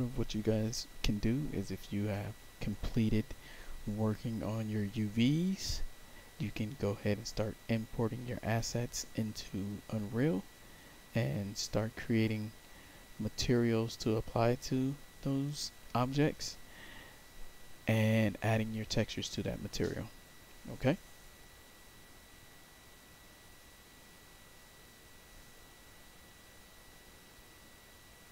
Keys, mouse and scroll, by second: 28.2 click.